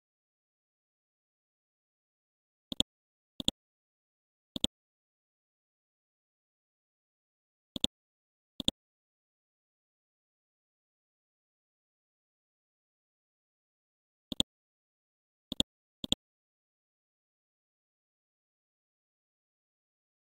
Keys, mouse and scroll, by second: 0.0-1.2 scroll down 1, 1.2 F12, 2.7 click, 5.5 KP_5, 5.6 KP_0, 7.7 click, 8.9-9.5 scroll down 1, 9.5-10.1 scroll up 1, 14.3 click, 19.1-19.9 scroll down 1, 19.9 scroll up 1.